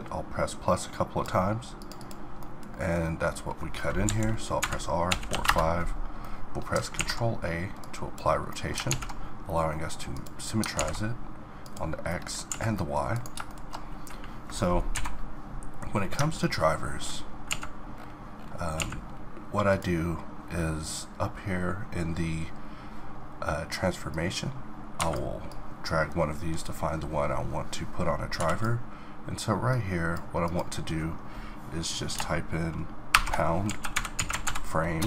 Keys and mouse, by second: 2.4-4.0 middle drag, 4.0 KP_7, 4.6 r, 6.2 middle click, 6.9 ctrl+a, 8.9 alt+x, 10.7 alt+x, 12.1 middle click, 12.5 a, 13.5-15.0 middle drag, 15.0 n, 16.5-17.6 middle drag, 17.6 a, 18.8 a, 19.7-21.5 drag, 24.1-27.2 drag, 29.7-32.2 drag.